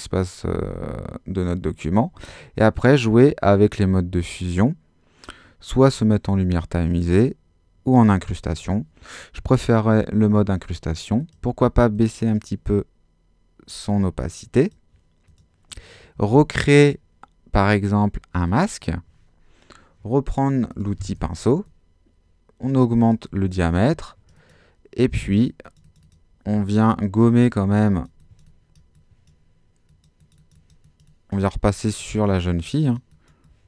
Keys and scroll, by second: 16.2 Escape.